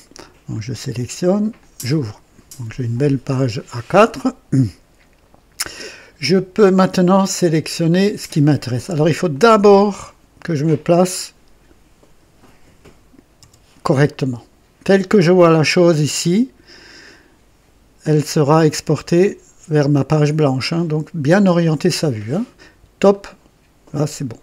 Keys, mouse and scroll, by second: 0.4 click, 1.5 click, 2.7-3.1 scroll down 2, 3.9-4.7 right drag, 7.3 click, 9.2-10.0 drag, 13.3 KP_2, 23.0 click.